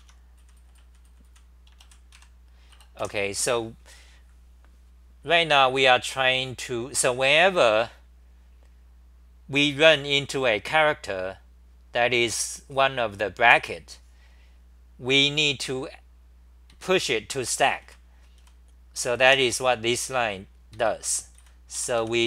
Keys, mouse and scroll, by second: 0.0-1.8 typing, 2.1 Right, 3.0 Return, 3.0 2, 16.7 ctrl+g, 17.9 c, 18.4 r, 20.5-22.2 typing.